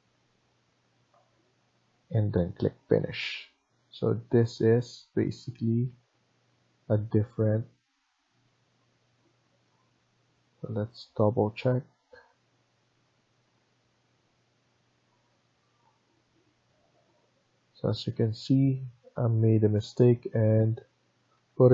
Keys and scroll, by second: 0.4 Escape, 1.0 Escape, 4.5 Tab, 5.8 Escape, 6.0 Escape, 8.0 Escape, 8.2 Escape, 10.1 Escape, 18.7 Escape.